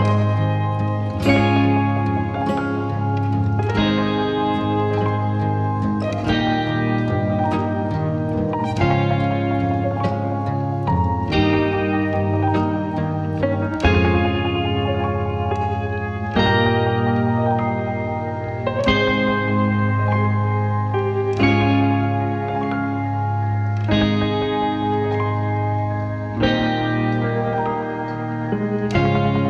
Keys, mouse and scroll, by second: 0.2 click, 1.1 click, 1.6-2.1 scroll up 29, 2.1-2.4 scroll down 16, 2.4 click, 3.2 scroll down 17, 4.1 click, 5.4 scroll up 16, 5.9-6.6 scroll down 1, 6.6-7.9 drag, 10.6 s, 12.1 s, 14.5 click, 15.1 click, 16.2-19.0 drag, 19.1-22.2 drag, 22.2 ctrl+i, 23.2-24.6 drag, 25.0 click, 26.3 scroll down 3, 27.3-28.8 drag, 28.8 scroll down 2, 29.3-29.4 drag.